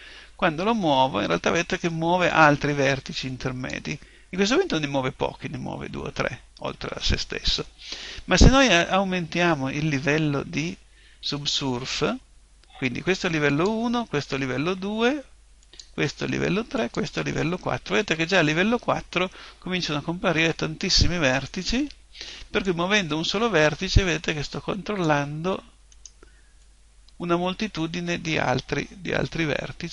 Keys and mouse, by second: 0.6 click, 13.5 click, 22.6 click, 25.9 right click, 26.6 click.